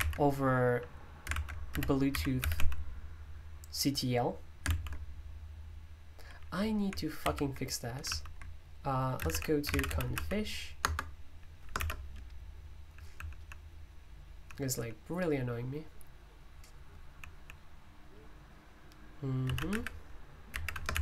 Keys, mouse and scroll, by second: 0.0 super+o, 1.3 super+l, 1.5-3.0 typing, 4.7 F5, 7.2 super+u, 8.0 super+l, 9.2-10.6 typing, 10.8 Return, 11.7-14.7 typing, 16.1-17.3 typing, 19.4-21.0 typing.